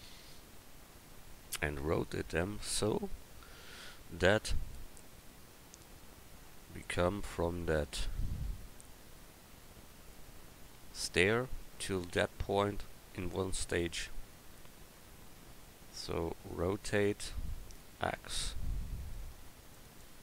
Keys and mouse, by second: 2.3 KP_1, 3.8 KP_3, 7.3-8.6 middle drag, 13.7 middle click, 16.7 r.